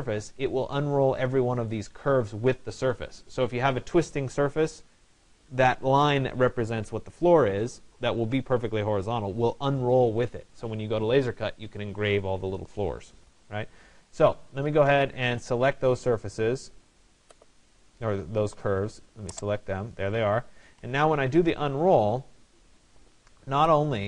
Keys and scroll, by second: 20.3 Return.